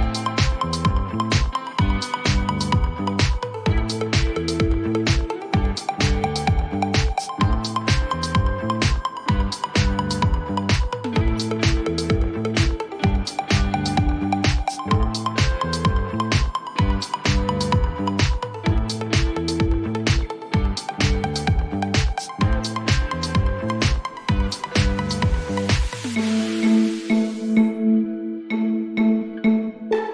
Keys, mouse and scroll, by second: 19.1-20.9 drag.